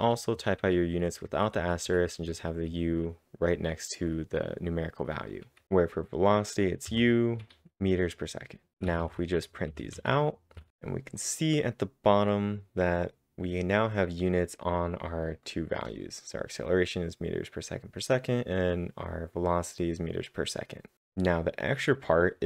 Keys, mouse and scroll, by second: 5.4 typing, 6.8 typing, 8.5-11.1 typing.